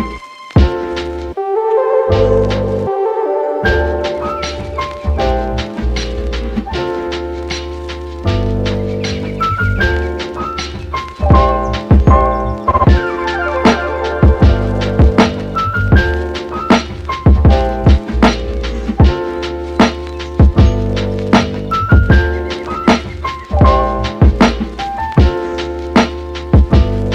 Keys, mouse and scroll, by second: 1.2-1.9 scroll down 1, 1.9 scroll up 1, 2.1-3.4 middle drag, 3.4-3.7 scroll up 3, 3.7-5.2 middle drag, 5.2 scroll down 2, 5.5-6.7 middle drag, 6.7 scroll down 2, 6.9 middle click, 7.3 a, 8.0-8.4 scroll up 1, 8.4 u, 13.0 middle click, 13.9 Tab, 14.3 shift+c, 17.1 drag, 17.6 middle click, 17.8 scroll up 2, 18.0-19.2 scroll down 13, 19.2-19.7 scroll up 4, 23.6 click, 24.1 Tab, 24.6 Tab, 24.8 click, 25.1-27.1 middle drag.